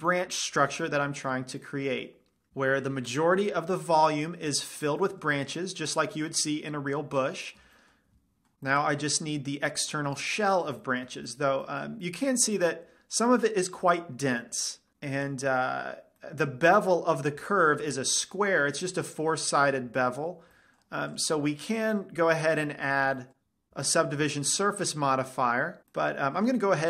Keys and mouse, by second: 3.2-8.6 middle drag, 9.3-9.9 middle drag, 13.0-14.5 middle drag, 15.8 middle drag, 16.2-17.4 middle drag, 21.7-23.4 drag, 23.4-23.8 middle drag, 24.4-26.1 middle drag, 26.5-26.8 middle drag.